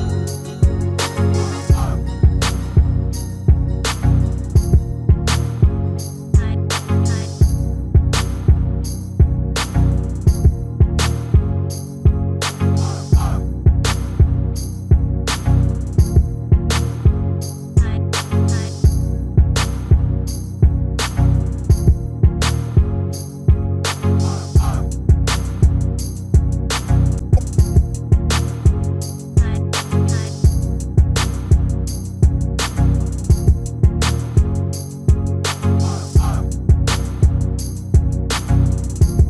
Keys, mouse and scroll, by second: 5.0-7.0 drag, 6.2-15.1 middle drag, 16.6-18.6 middle drag, 19.9-21.6 right drag, 20.9-22.7 drag, 23.4 s, 25.9-27.7 middle drag, 28.6-30.4 drag, 30.5-33.6 middle drag, 34.0-37.7 middle drag, 37.6 Tab, 38.3 Tab, 38.7-39.2 middle drag.